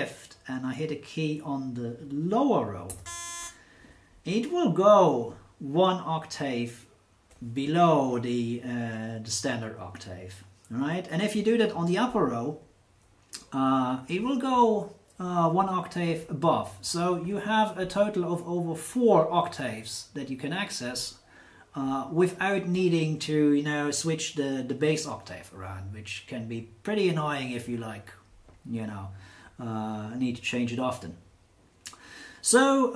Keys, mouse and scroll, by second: 2.8 shift+c, 8.0 F8.